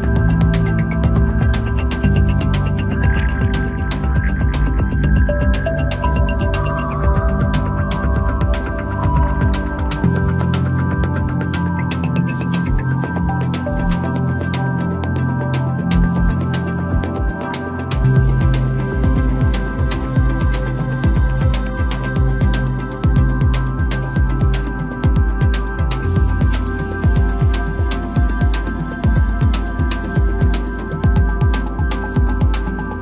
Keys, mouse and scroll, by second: 0.0-0.4 shift+middle drag, 0.4-1.6 scroll up 2, 1.6 Tab, 2.2-4.1 middle drag, 4.1 ctrl+r, 6.0 Tab, 7.3 KP_0, 8.0-8.4 scroll up 2, 8.4-9.9 right drag, 9.9-10.2 scroll down 2, 10.2-12.0 middle drag, 12.0-13.0 scroll down 2, 13.0 KP_0, 14.0-14.8 scroll up 2, 14.8-15.3 scroll up 1, 15.3-18.3 drag, 21.0-30.2 drag, 30.9-32.7 scroll up 2, 32.7 click.